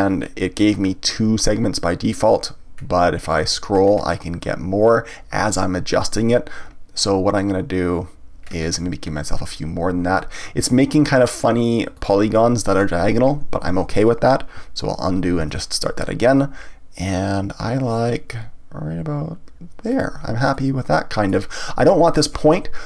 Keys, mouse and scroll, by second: 12.0 click, 13.7 ctrl+z, 15.4 ctrl+b, 20.0 click, 20.5-22.8 middle drag.